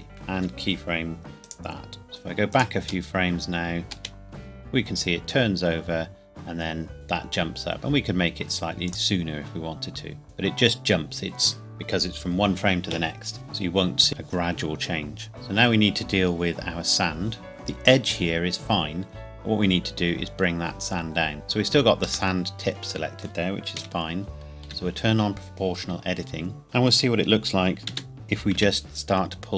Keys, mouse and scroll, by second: 0.4 i, 1.4 click, 3.9 space, 8.9 click, 15.3 click, 17.5 scroll up 1, 20.2 Tab, 22.3 middle click, 23.8 KP_1, 24.7 o, 27.9 g, 28.6 z.